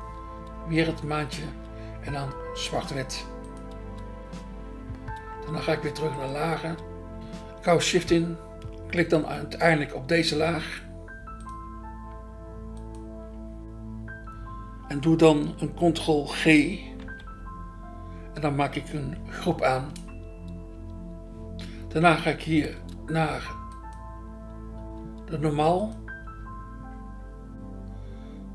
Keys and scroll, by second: 0.0 BackSpace, 0.5 BackSpace, 1.5 BackSpace, 3.8 BackSpace, 6.6 BackSpace, 10.3 BackSpace, 17.0 ctrl+g, 19.9 BackSpace, 26.3 BackSpace.